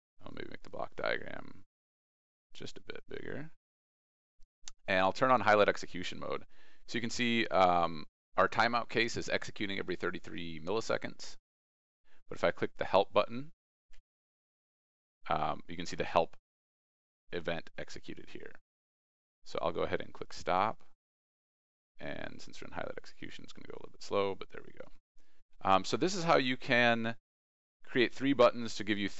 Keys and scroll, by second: 0.9 ctrl+e, 13.8 alt+Tab, 22.1 ctrl+e.